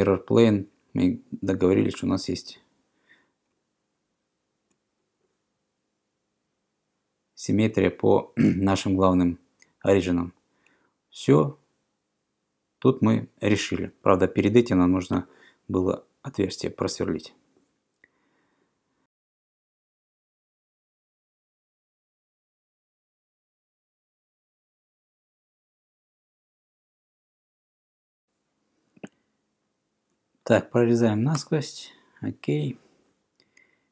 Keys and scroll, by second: 19.2-21.3 typing, 23.7-26.1 typing, 26.2 Return, 27.2-28.0 typing, 28.1 Escape, 31.4 Return.